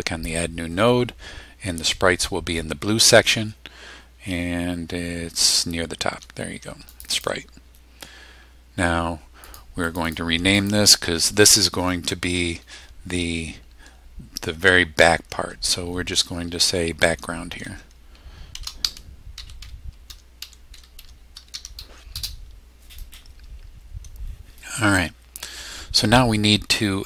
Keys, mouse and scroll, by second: 0.7-1.4 scroll up 4, 1.7-2.0 scroll down 1, 2.7 scroll up 2, 3.4 scroll up 2, 4.1 scroll up 2, 6.9 click, 9.4 click, 9.8 click, 10.5 click, 17.6-22.0 typing.